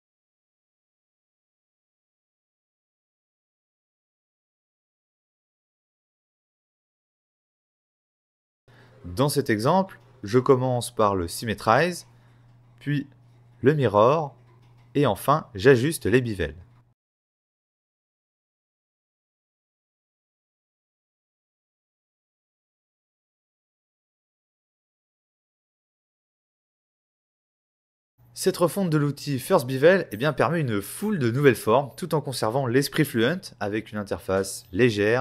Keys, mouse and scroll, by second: 0.5 ctrl+click, 4.9 right click, 5.6 v, 6.0 click, 6.9 click, 8.2 z, 8.7 click, 10.4 middle click, 12.1 click, 13.9 x, 14.9 scroll up 1, 16.3 click, 17.2 click, 24.3 shift+x, 25.0-25.5 scroll up 4, 26.1 x, 30.6 shift+x, 30.9 scroll down 4, 31.2-31.6 scroll up 1, 31.6 middle click, 32.6 scroll down 2, 32.8 shift+middle click, 33.5 x, 34.1 x, 34.4 scroll up 4.